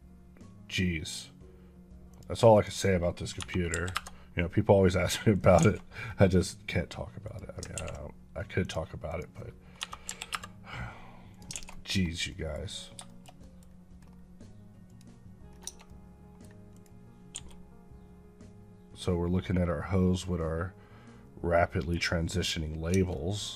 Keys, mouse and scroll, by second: 0.9 click, 3.6 KP_2, 3.8 KP_Enter, 5.2 click, 5.6 a, 7.1 click, 8.5 click, 10.2 KP_Enter, 11.2 click, 11.6 a, 12.2 middle click, 12.7 scroll down 1, 13.0 shift+middle click, 14.7 click, 15.4 scroll down 1, 15.5 Tab, 15.7 middle click, 16.6 click, 17.2 g, 21.7 right click, 22.8 Tab, 23.0 middle click.